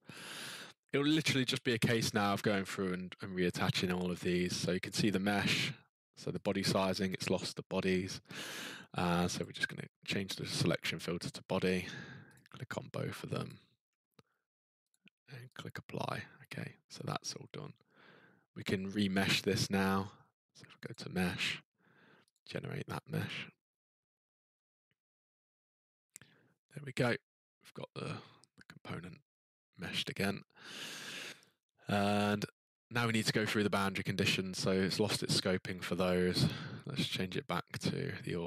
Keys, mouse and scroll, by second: 4.4 click, 6.4 click, 9.4 click, 12.3 click, 13.5 ctrl+click, 14.9 click, 15.5 click, 17.6-18.4 scroll, 18.4 scroll, 19.8 click, 20.9 click, 22.3 click, 30.0-33.8 scroll, 33.8 click, 34.8 click, 37.0 click.